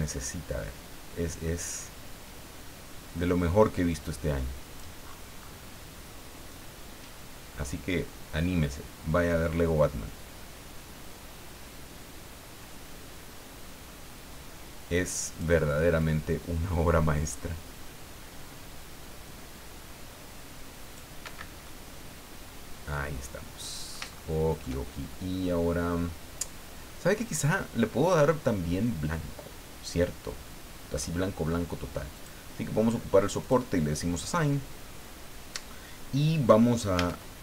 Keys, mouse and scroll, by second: 5.4 scroll up 2, 6.5-15.6 drag, 15.9-21.2 drag, 21.2 Escape, 21.6-24.0 middle drag, 24.0 shift+click, 24.2 shift+scroll up 2, 32.1 click, 33.4 click, 36.9 a.